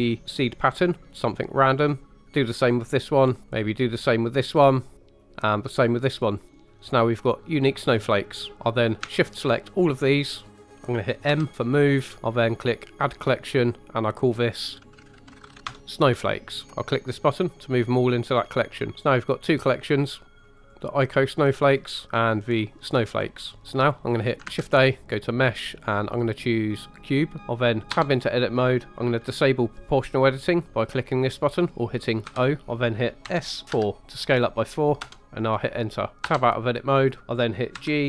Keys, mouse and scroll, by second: 0.8 click, 1.7 click, 3.0 click, 3.5 click, 4.9 click, 6.1 click, 9.3 shift+click, 9.8 shift+click, 10.4 shift+click, 10.6 shift+click, 11.3 m, 19.6 click, 20.4 click, 21.6 click, 22.4 click, 23.6 shift+middle click, 24.5 shift+a, 27.4 Tab, 27.9 Tab, 32.2 o, 33.2 s, 33.7 4, 35.0 Return, 36.2 Tab, 37.2 ctrl+right click, 37.7 g.